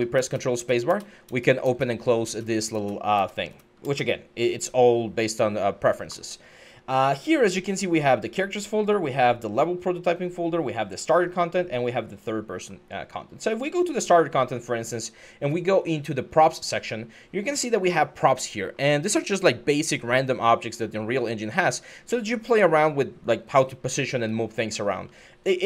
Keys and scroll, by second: 0.4 ctrl+space, 0.7 ctrl+space, 1.1 ctrl+space, 1.4 ctrl+space, 23.1-24.8 typing.